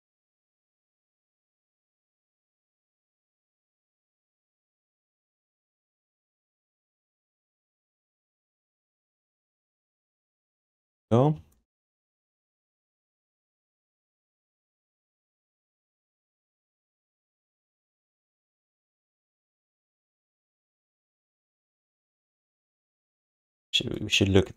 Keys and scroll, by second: 10.4 q, 11.0 3, 11.8 1, 20.9 alt+shift+d, 21.6 q, 22.3 alt+shift+d.